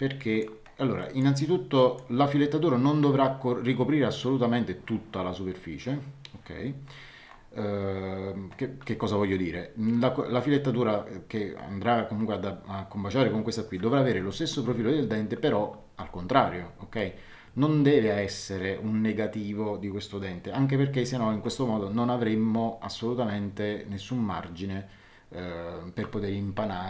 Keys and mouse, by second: 1.0 middle click.